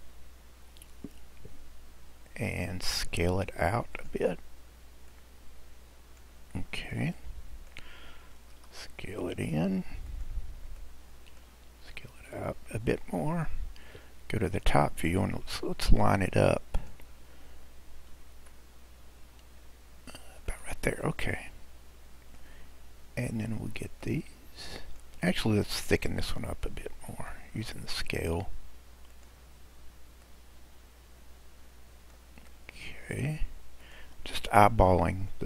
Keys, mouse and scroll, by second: 3.9-5.3 drag, 6.6-7.0 scroll down 2, 7.0-8.5 middle drag, 8.5 s, 10.8-12.4 middle drag, 12.4 drag, 14.5 click, 15.3-16.7 scroll up 4, 16.7-18.3 drag, 18.3 g, 21.0-22.7 middle drag, 22.7-23.5 scroll up 1, 23.5-24.0 scroll up 4, 24.0 click, 25.6 click, 26.3-29.1 middle drag, 29.1-30.5 drag, 32.5-33.8 middle drag, 33.8 click.